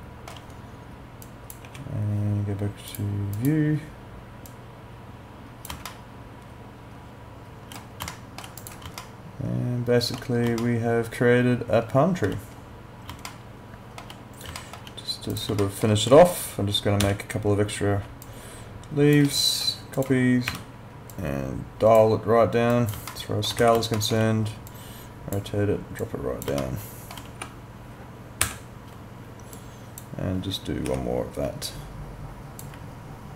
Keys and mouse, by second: 1.2 click, 1.7 e, 2.9 click, 5.9 alt+middle click, 8.2 alt+middle click, 8.6 click, 9.0 alt+middle click, 10.6 alt+middle click, 13.3 alt+middle click, 14.6 alt+middle click, 15.3 click, 15.6 alt+middle click, 17.0 w, 18.3 shift+click, 20.5 r, 21.1 click, 23.1 alt+middle click, 23.6 e, 24.0 alt+middle click, 24.7 click, 26.6 alt+middle click, 27.4 w, 29.5 click, 30.9 e, 31.6 shift+click.